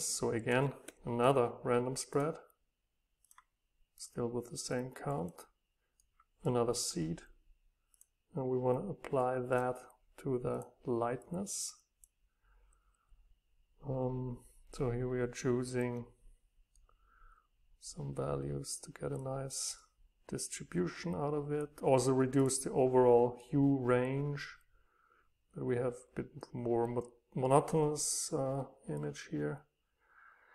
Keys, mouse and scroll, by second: 0.4-2.1 right drag, 3.4-6.0 drag, 6.0-7.9 right drag, 7.9-13.9 drag, 17.0-18.4 drag, 26.1-30.5 right drag.